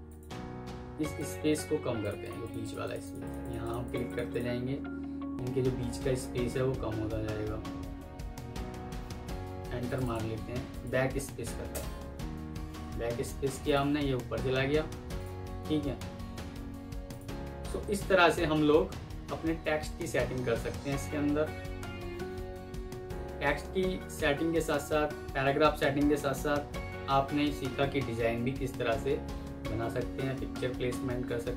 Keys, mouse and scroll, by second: 2.1 double click, 9.9 double click, 11.6 BackSpace, 13.8 Escape, 16.5 Escape, 18.4 F9.